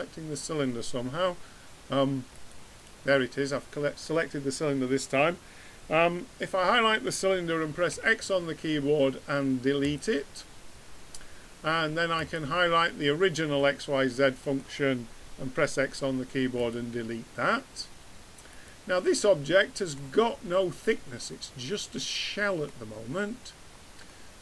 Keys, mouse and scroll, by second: 2.3-4.1 drag, 7.9 x, 12.1-13.9 drag, 13.9 middle click, 15.6 x, 18.5 click, 19.2-20.2 middle drag.